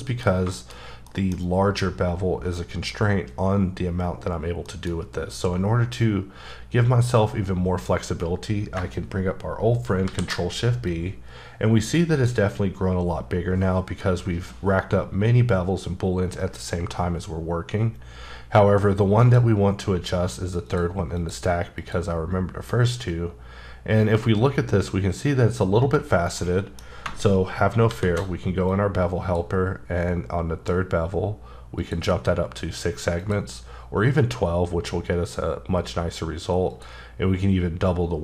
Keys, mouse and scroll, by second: 0.8-1.4 scroll up 4, 1.0 middle click, 4.4 scroll down 1, 4.7 middle click, 5.4-5.7 scroll up 1, 8.7-9.4 scroll up 4, 10.0 shift+b, 10.9 click, 19.2 click, 20.6 click, 21.2 click, 21.8 click, 26.4 middle click, 27.9 shift+b, 28.7 click, 31.8 click, 33.2 click, 36.7 click.